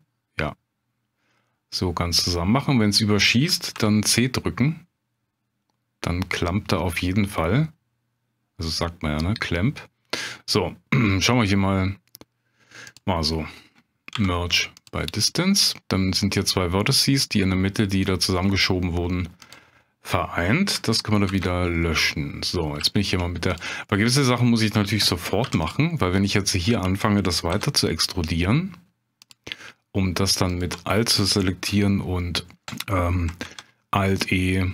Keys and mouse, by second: 3.7 c, 12.9 click, 14.1 m, 18.5 middle click, 19.4 click, 21.3 ctrl+x, 21.9 middle click, 22.9 shift+click, 23.5 click, 23.9 middle click, 25.4 3, 25.6 click, 26.0 middle click, 27.5 e, 29.2 click, 30.5 alt+click, 33.4 alt+e.